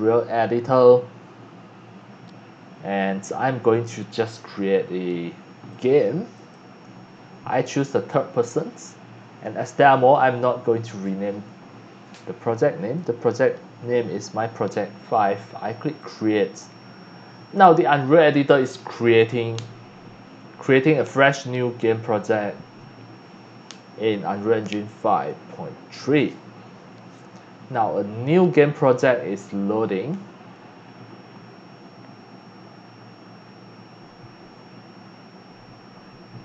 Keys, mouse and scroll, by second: 5.7 click, 6.3 click, 7.9 click, 12.9-14.7 drag, 15.0 click, 16.0 click.